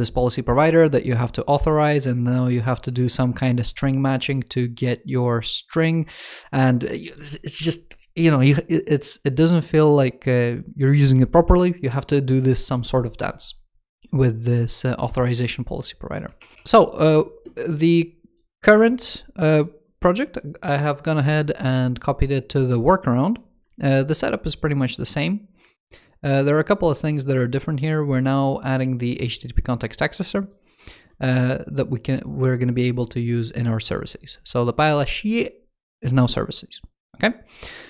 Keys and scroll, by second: 16.1 super+w.